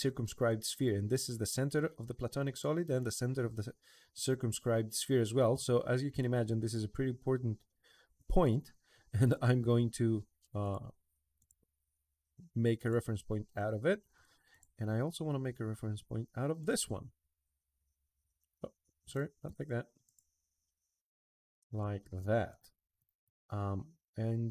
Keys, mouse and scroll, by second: 0.9 click, 6.4 click, 9.0 click, 10.4 click, 11.2 click, 12.6 click, 14.3 click, 16.4 click, 19.2 ctrl+z, 19.8 click, 21.4 click, 22.3 click, 22.8 click, 23.0 click.